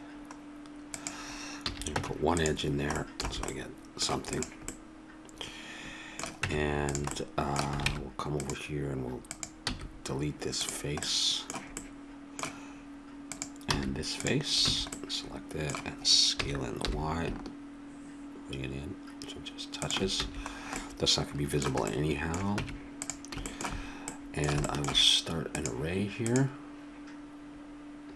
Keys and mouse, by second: 1.6 a, 2.0 Tab, 3.2 a, 4.3 click, 6.4 Tab, 7.9 ctrl+Tab, 9.6 x, 13.3 click, 13.7 x, 14.6 a, 16.3 s, 20.2 a, 22.6 Tab, 25.5-27.2 drag, 27.5 middle click.